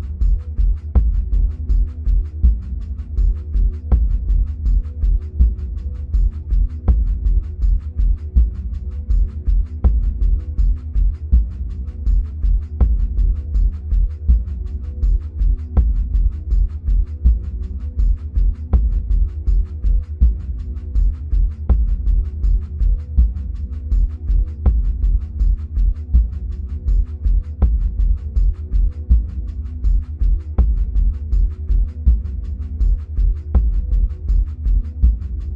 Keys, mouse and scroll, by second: 0.0-24.4 drag, 27.3 ctrl+click, 28.9 ctrl+z, 30.2 ctrl+click, 33.3 ctrl+z.